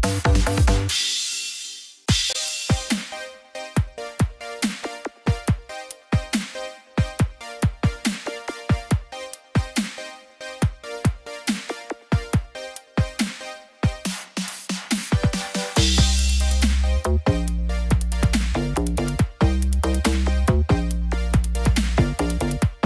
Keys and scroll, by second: 2.9 ctrl+j, 3.2 ctrl+t, 21.9 ctrl+0.